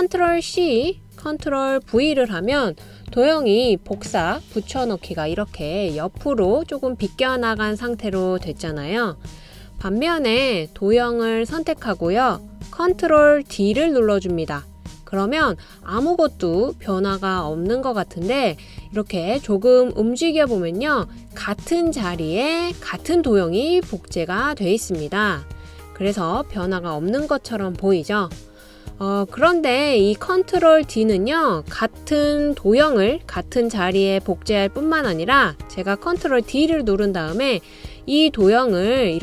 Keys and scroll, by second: 0.5 super+c, 2.0 super+v, 9.4 BackSpace, 13.7 super+d, 27.9 BackSpace, 36.4 super+d.